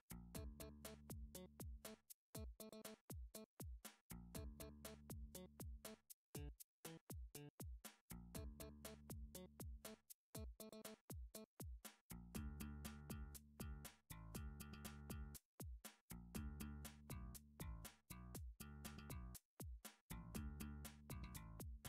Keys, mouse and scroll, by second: 0.2 click, 1.0 alt+z, 2.3 alt+z, 2.3-3.4 scroll, 5.5-6.1 scroll, 6.1 shift+middle click, 8.8 middle click, 9.3 alt+z, 11.1 middle click, 11.8 3, 12.3 alt+z, 15.0 ctrl+s, 16.3 click, 17.4 click, 19.6 7, 20.5 a, 21.7 click.